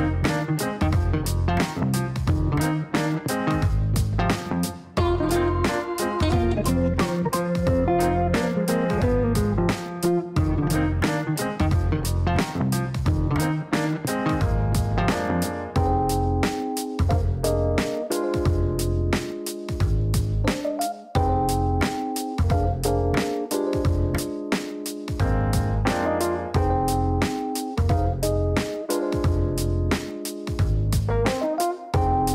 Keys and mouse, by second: 10.5 click, 14.8 click, 16.0 click, 17.6 click, 19.6 click, 20.3 click, 21.3-22.5 typing, 22.6 Down, 23.9 d, 25.3 BackSpace, 27.0-27.8 typing, 27.9 Down, 28.1 Down, 28.2 Down, 28.4 Down, 28.7 Down, 28.8 Down, 29.1 Down, 29.6 Return, 30.2 KP_Enter, 32.2 click.